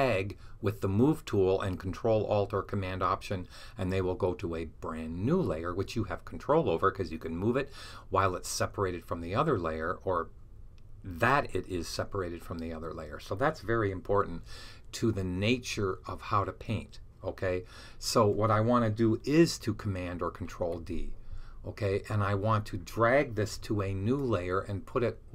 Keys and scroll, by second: 20.4 super+d, 23.4 super+d.